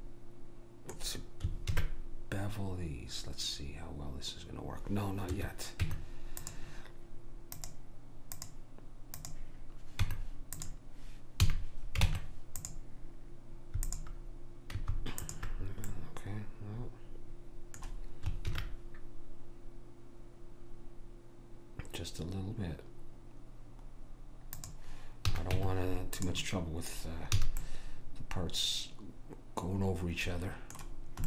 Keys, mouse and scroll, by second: 1.7 ctrl+b, 5.8 Tab, 9.4 click, 10.0 Tab, 11.5 a, 12.1 ctrl+Tab, 13.9-17.2 drag, 15.9 right click, 17.2 middle click, 18.5 ctrl+b, 25.3 a, 25.6 Tab, 27.4 a, 27.8 middle click.